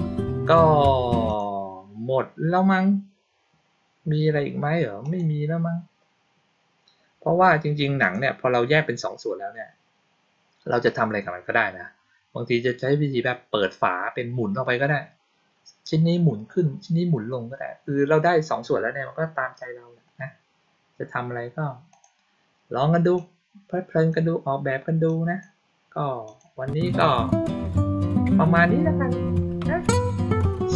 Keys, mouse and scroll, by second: 1.2 click, 4.9 click, 7.9 click, 21.8 click, 23.1-24.0 drag, 25.0 click, 26.2 click.